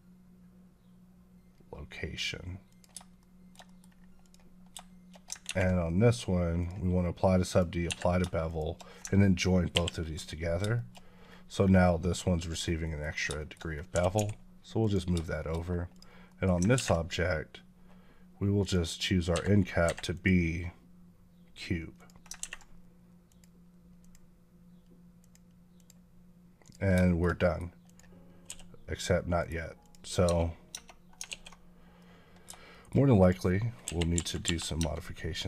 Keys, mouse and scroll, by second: 2.5 click, 3.0 shift+middle click, 4.1 click, 6.4 click, 7.4 click, 7.7 Escape, 8.3 shift+click, 10.6 middle click, 10.9-11.4 scroll up 2, 12.4 scroll down 1, 12.7 middle click, 12.9-13.6 scroll down 4, 13.2 shift+middle click, 13.8 g, 14.0 x, 14.7 click, 15.2 shift+middle click, 15.4 scroll up 1, 15.8 click, 16.1 middle click, 18.5 click, 19.2 Escape, 20.0 click, 23.1 click, 26.9 shift+middle click, 27.7 click, 28.3 s, 29.3 right click, 29.7 click, 30.1 Tab, 30.5 scroll up 1, 30.5 Tab, 31.2 alt+s, 31.8 middle click, 32.5 shift+middle click, 33.0 click, 33.7 KP_1, 34.2 KP_5, 34.3 KP_5, 34.6 Tab.